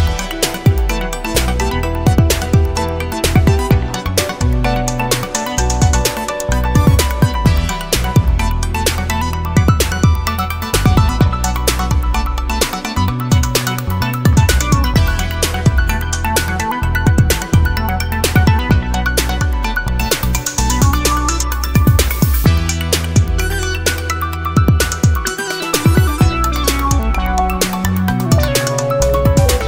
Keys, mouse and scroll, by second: 1.1-1.4 scroll up 2, 1.6 1, 2.4-3.0 scroll down 2, 3.0 scroll up 2, 4.7 click, 6.2 ctrl+click, 7.9 ctrl+click, 8.8 ctrl+click, 10.3 click, 11.7 click, 15.7 click, 18.1 click, 19.4 click, 21.0 click, 22.4 click, 25.7 click, 27.8 click.